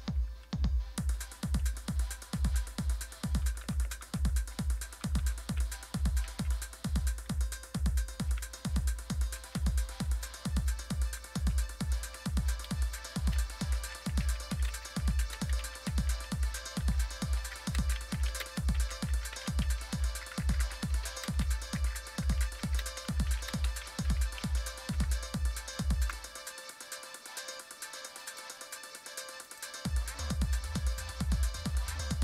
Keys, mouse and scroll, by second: 1.6-2.3 Up, 2.6-3.3 Down, 3.6 Down, 3.8 Down, 4.0 Down, 4.9 shift+Down, 5.2 shift+Down, 6.2 ctrl+c, 6.6 Up, 7.1 Up, 7.2 Up, 7.4 Up, 7.7 Return, 9.2 ctrl+v, 12.2-26.6 typing, 28.2 click, 29.5 click, 30.6-31.3 scroll down 1, 31.3-32.2 scroll down 1.